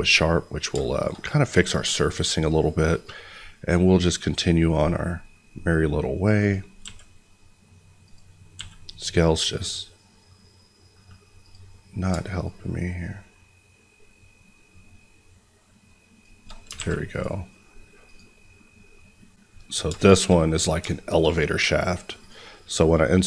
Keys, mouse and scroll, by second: 0.0 middle click, 1.8 click, 5.5-6.4 scroll, 6.4 click, 6.8 s, 8.0 click, 8.5 s, 11.3 click, 16.7 alt+a, 17.1 click, 19.7-20.0 scroll down 2, 20.0 shift+middle click, 22.1 click.